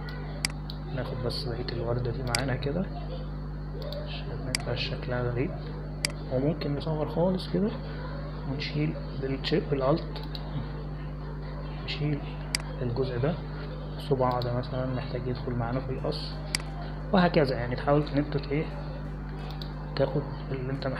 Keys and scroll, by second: 2.1 space, 9.1 [, 9.3 [.